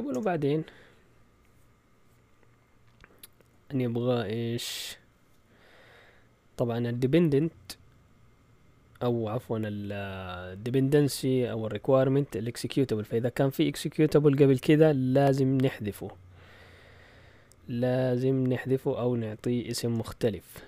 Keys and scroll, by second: 0.1 Return.